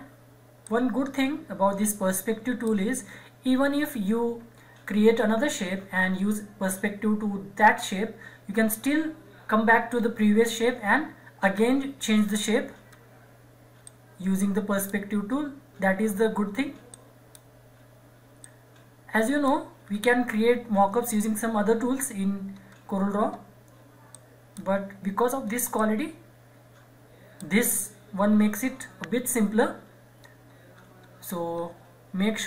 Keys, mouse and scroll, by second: 0.6-3.0 drag, 3.0 scroll down 1, 5.7 scroll up 1, 12.9-13.9 scroll up 1, 13.9-15.3 drag, 15.3-15.8 scroll up 1, 16.9-19.8 drag, 19.8-20.2 scroll down 1, 22.1-22.5 scroll down 1, 24.1-28.3 drag, 28.3-29.1 scroll down 1, 30.2-30.7 scroll up 1.